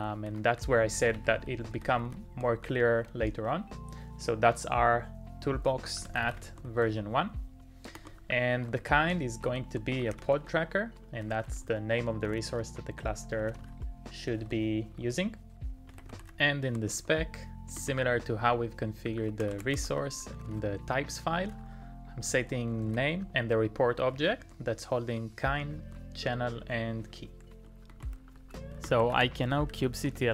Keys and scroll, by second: 0.0-2.6 typing, 3.4 Return, 5.8-16.9 typing, 18.8-30.1 typing.